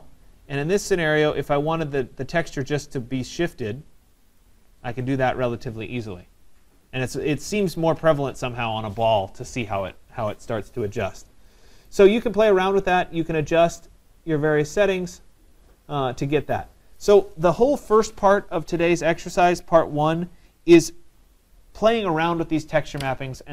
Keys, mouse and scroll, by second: 4.4 click, 7.8 right click, 10.3 Return, 11.9 right click, 14.7 click, 16.9 right click.